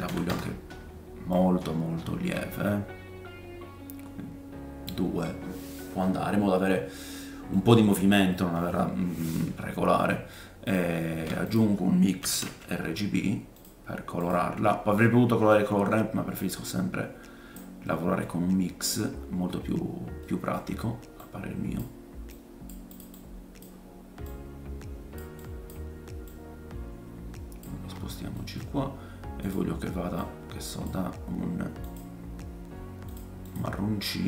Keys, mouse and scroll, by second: 1.3 click, 6.0 middle click, 8.3 middle click, 9.6-10.1 scroll down 3, 10.1 middle click, 10.7-16.4 shift+drag, 11.1 shift+a, 16.4-18.4 middle drag, 18.4 scroll up 2, 19.0-19.5 scroll down 4, 20.2 middle click, 20.6-20.9 scroll down 2, 21.2-25.5 drag, 21.2-23.0 middle drag, 21.2-23.0 right drag, 23.1-24.1 middle drag, 23.1-24.1 right drag, 26.2 click, 27.8-29.3 scroll up 6, 28.3 middle click, 29.5-34.2 drag, 29.5 middle click, 29.5 right click, 33.1 middle click, 33.1 right click, 33.4 middle click, 33.4 right click.